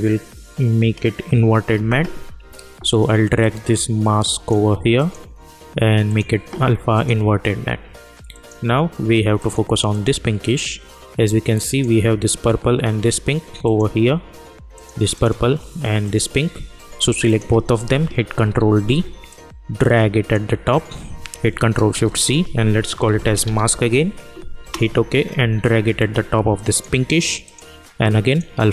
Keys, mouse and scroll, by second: 3.3-4.9 drag, 17.2 ctrl+click, 18.3 ctrl+d, 19.2-22.0 drag, 22.0 ctrl+shift+c, 22.8-24.0 typing, 24.6 Return, 25.9-28.7 drag.